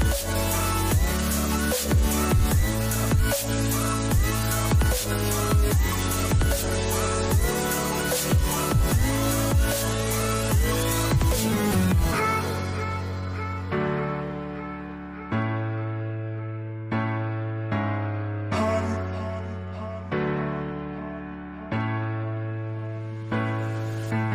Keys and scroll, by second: 13.6 Right, 13.9 Down, 14.1 Right, 14.1 Down, 14.2 Right, 14.3 Up, 15.4 Left, 15.5 Up, 17.7 ctrl+c, 17.9 ctrl+v.